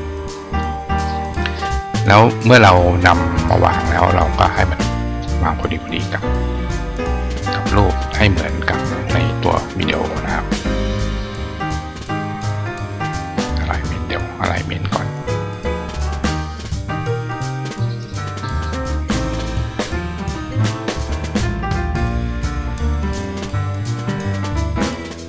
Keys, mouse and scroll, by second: 0.3 click, 1.9 click, 2.5 click, 3.1-5.0 drag, 9.7 shift+click, 11.5 click, 13.8 click, 18.9 click, 21.6 click, 22.5 click, 23.4 click, 24.4 click.